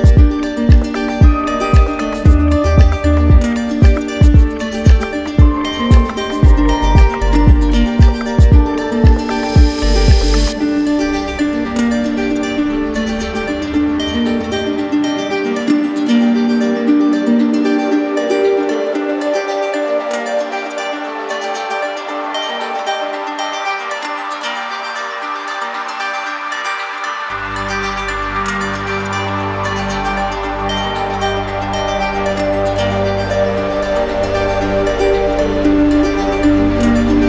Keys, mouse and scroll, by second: 0.0-0.4 typing, 2.2 right click, 3.6-5.0 drag, 5.6 right click, 6.2 right click, 7.2 right click, 8.1 click, 9.4 click, 11.0 right click, 12.6 click, 13.2 click, 14.4 click, 14.8 click, 15.7 click, 16.9 click, 17.3 click, 17.9 click, 18.6 click, 20.0 right click, 21.4 right click, 23.2 click, 24.5 click, 26.2 ctrl+click, 26.5 ctrl+z, 30.7-31.7 right drag, 36.0 right click, 36.4 ctrl+d.